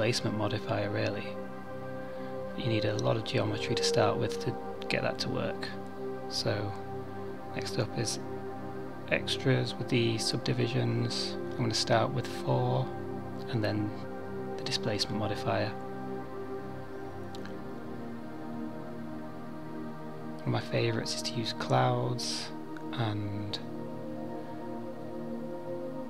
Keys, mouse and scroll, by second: 0.6 Tab, 2.3 click, 3.0 click, 9.1 click, 9.4 click, 9.9 click, 12.3 click, 15.8 click, 16.9 click, 20.0 click, 23.6 click, 24.8 click.